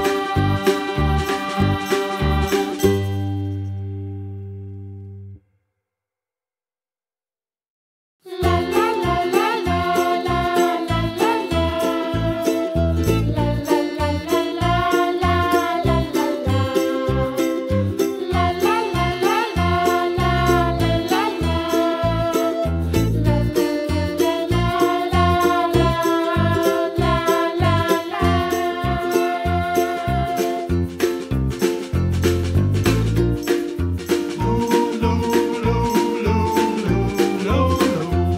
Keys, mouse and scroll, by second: 0.0 middle click, 0.7 click, 1.3 click, 1.7 shift+click, 2.1 shift+click, 2.4 shift+click, 2.7 middle click, 3.1 click, 3.6 middle click, 4.5 shift+click, 4.8 shift+click, 5.6 click, 6.1 g, 8.0-9.0 middle drag, 9.0 click, 10.4 click, 10.7 middle click, 11.2 click, 11.9 shift+click, 12.1 shift+click, 12.4 shift+click, 12.6 shift+click, 12.8 shift+click, 13.2 click, 13.8 g, 14.8 ctrl+z, 15.5 middle click, 15.8 shift+click, 16.0 middle click, 16.5 click, 16.7 g, 18.7 middle click, 19.1 click, 19.3 shift+click, 19.5 shift+click, 19.9 click, 20.4 g, 22.2 middle click, 22.6 click, 23.1 shift+click, 24.1 click, 24.8 click, 25.4 g, 27.4 s, 28.7-29.9 middle drag, 30.5 middle click, 31.0 click, 31.7 1, 31.9 click, 32.7 shift+click, 33.2 s, 34.4 click, 34.6 scroll down 1, 34.8-36.9 middle drag, 36.9 click, 37.2 middle click, 37.6-38.0 scroll up 3, 38.0 middle click.